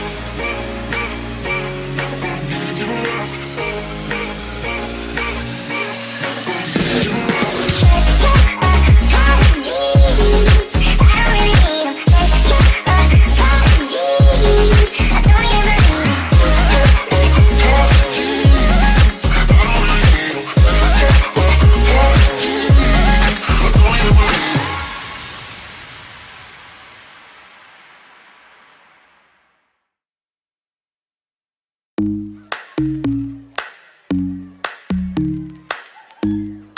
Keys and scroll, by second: 20.1-24.1 typing, 30.8-36.7 typing.